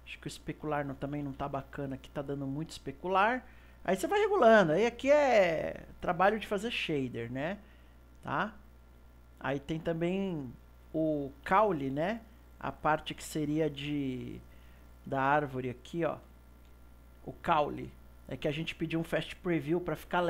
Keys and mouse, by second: 0.6-3.6 drag, 10.1 click, 11.5 KP_1, 12.2-13.6 ctrl+middle drag, 13.6 KP_2, 15.9 click, 16.4-19.4 shift+middle drag.